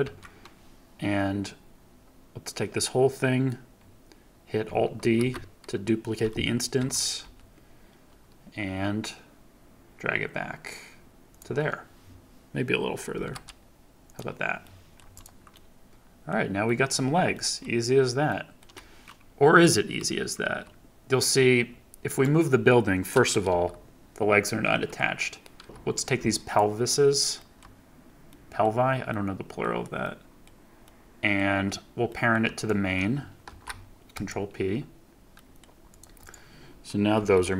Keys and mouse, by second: 0.0 KP_3, 3.0-4.6 drag, 5.1 alt+d, 6.7 x, 7.2 y, 11.2-13.1 drag, 13.1 g, 13.2 y, 14.0-14.9 drag, 15.1 click, 15.5-16.1 drag, 16.2-16.6 middle drag, 16.9 shift+middle click, 17.5-18.2 middle drag, 18.5-22.1 middle drag, 20.4 KP_3, 22.1-23.4 middle drag, 23.4 g, 24.7 F1, 25.6 Escape, 26.4 shift+middle click, 28.2 middle click, 29.0-29.6 middle drag, 30.0-30.4 middle drag, 30.8-31.3 middle drag, 32.0 middle drag, 32.5 shift+middle click, 33.4 ctrl+p, 35.3 middle drag, 35.8 middle click, 36.2 middle click, 37.1 g.